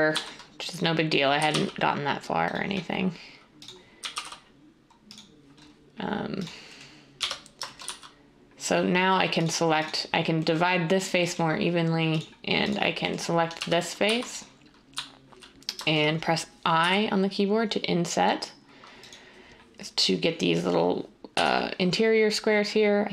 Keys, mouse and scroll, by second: 0.0-0.1 typing, 1.3 typing, 3.9 typing, 7.1-8.4 typing, 13.5-14.1 typing, 16.8 i, 21.3 g.